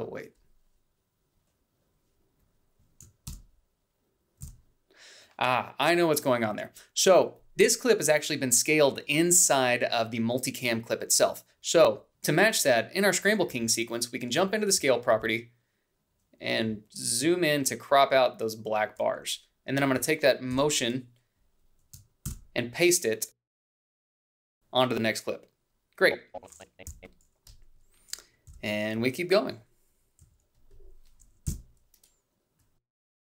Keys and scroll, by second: 6.0 ctrl+b, 7.1 ctrl+b, 23.3 ctrl+c, 25.0 ctrl+v, 31.3 h, 33.1 a.